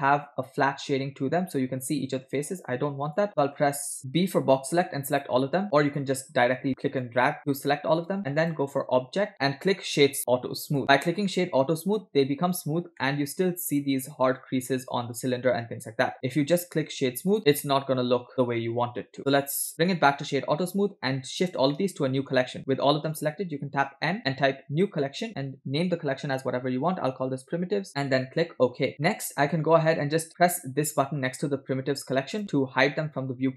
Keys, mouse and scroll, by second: 0.8 scroll up 2, 1.9 scroll up 1, 2.3-2.6 scroll down 3, 3.1 click, 3.7 g, 4.1 b, 5.9 click, 6.5-7.1 drag, 8.4-10.8 drag, 10.8 scroll up 3, 11.3 shift+middle drag, 11.6-11.9 scroll up 3, 13.0-13.8 middle drag, 16.1-17.4 drag, 17.6-19.2 middle drag, 19.2 click, 20.2 scroll down 2, 21.6 scroll down 2, 21.7-22.4 shift+middle drag, 24.0 m, 29.0 scroll down 2, 29.1-29.5 middle drag, 32.4 click.